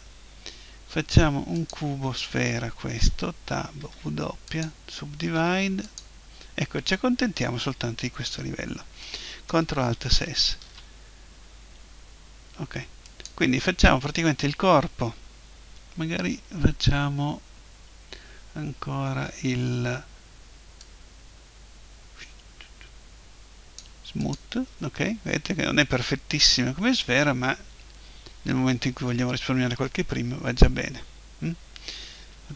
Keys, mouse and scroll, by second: 3.0 Tab, 3.8 w, 5.4 w, 10.1 alt+shift+s, 13.2-15.2 drag, 20.8-22.7 drag, 24.2-26.2 drag.